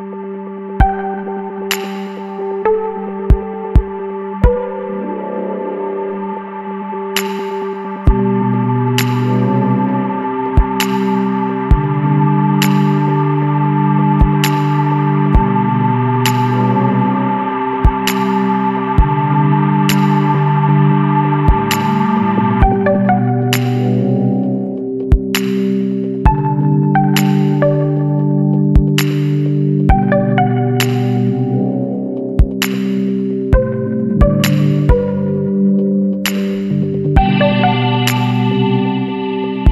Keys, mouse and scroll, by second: 2.8 click, 4.4 click, 5.4 scroll up 1, 6.1 scroll up 1, 8.5 click, 9.5-10.3 scroll up 2, 12.2 click, 14.5 click, 15.9 click, 16.5 Escape, 17.2 click, 18.6 click, 19.7 KP_1, 19.9 KP_0, 20.2 KP_Enter, 22.3 click, 23.7 click, 24.8 KP_1, 25.0 KP_8, 25.2 KP_0, 25.6 KP_Enter, 27.6 click, 29.1 click, 30.7 click, 33.3 click, 34.6 click, 35.7 Escape, 36.4 click, 37.8 click, 38.8 KP_7, 39.2 KP_2, 39.5 KP_Enter.